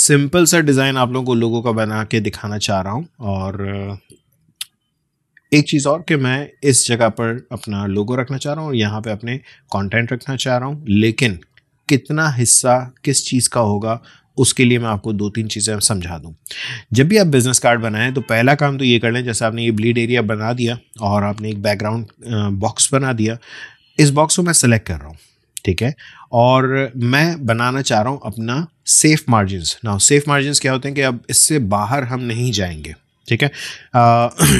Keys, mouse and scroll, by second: 4.3 ctrl+shift+], 5.4 click, 11.5-22.9 drag.